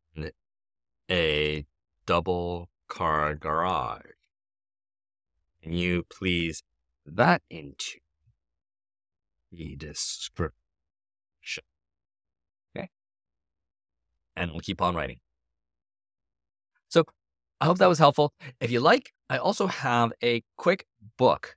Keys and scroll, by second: 0.4-11.9 typing.